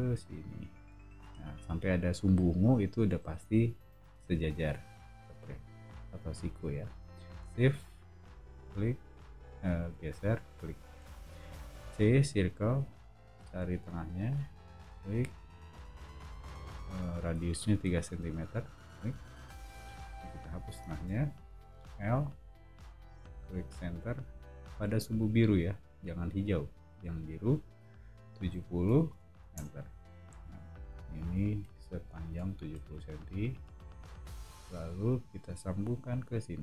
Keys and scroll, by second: 11.7 c, 19.6 space, 20.9 BackSpace, 21.7 l, 28.5-28.8 typing, 29.5 Return, 30.7 o, 35.1 Escape.